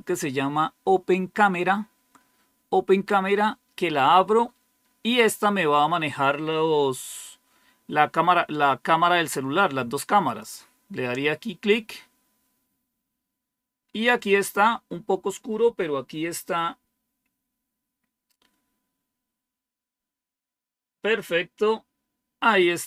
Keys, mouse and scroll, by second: 10.1 click, 22.6 click, 22.6 typing.